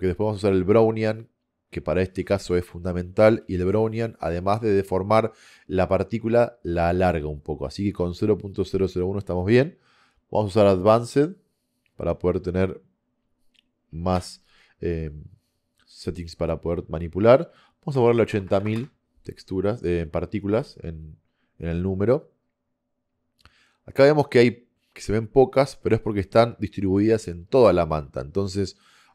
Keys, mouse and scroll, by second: 18.3 KP_0, 18.6 KP_0, 24.3 middle click, 24.4-25.6 middle drag, 25.7-28.2 middle drag.